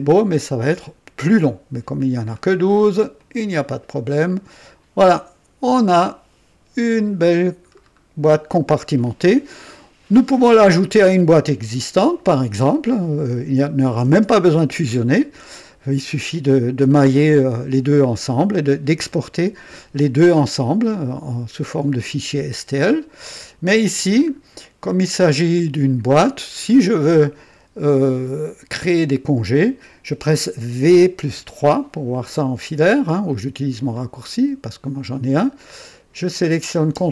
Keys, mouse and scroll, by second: 1.9-2.7 drag, 3.2 click, 4.3 click, 5.1-7.5 drag, 7.7-8.0 scroll down 1, 9.0-9.6 right drag, 24.2-24.5 scroll up 1, 24.8-25.5 right drag, 25.5-27.3 drag, 30.8 v, 31.2 KP_3, 33.3-34.0 drag, 35.9 click.